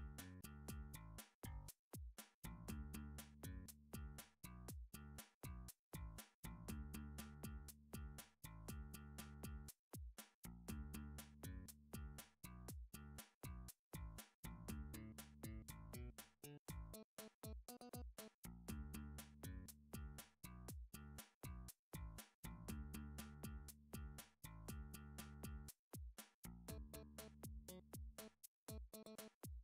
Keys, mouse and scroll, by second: 0.0 ctrl+r, 0.6 click, 0.8 click, 2.9 s, 3.3 z, 4.6 right click, 4.9 s, 5.2 z, 6.7 click, 7.3 s, 7.4 z, 8.2 click, 8.8 g, 9.1 z, 9.5 s, 9.5 g, 10.3 click, 11.5 alt+click, 12.7 alt+z, 18.7 s, 18.9 z, 20.1 click, 20.4 g, 20.8 z, 21.3 click, 21.9 click, 22.4 click, 23.9 click, 25.2 r, 27.4 click, 28.1 g.